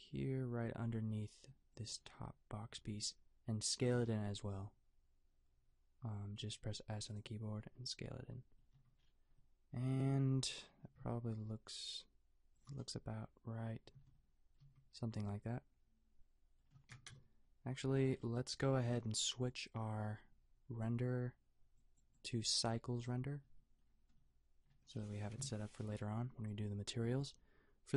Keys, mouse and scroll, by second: 4.1 s, 8.8 Tab, 10.4 Tab, 10.8 s, 14.0 Tab, 14.6 a, 17.1 KP_0, 25.3 KP_5.